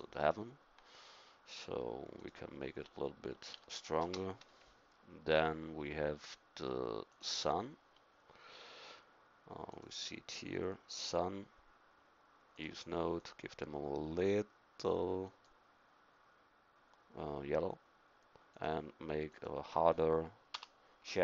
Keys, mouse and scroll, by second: 0.0-4.9 drag, 7.2-15.2 drag, 18.9-21.2 drag.